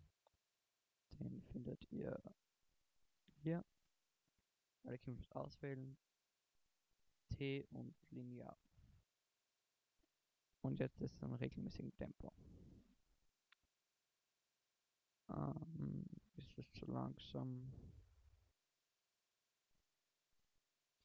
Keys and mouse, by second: 4.2 a, 4.5 a, 5.9 t, 6.9 t, 9.3 shift+Left, 9.7 alt+a, 15.1 alt+a, 15.7 alt+a, 20.6 alt+a.